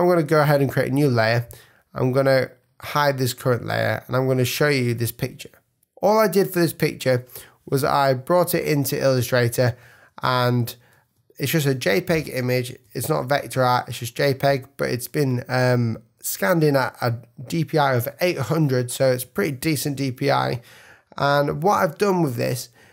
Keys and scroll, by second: 11.7 super+=, 14.7 super+-, 16.3 super+-, 18.3 super+space, 19.1 space, 19.8 super+=, 21.1 super+-.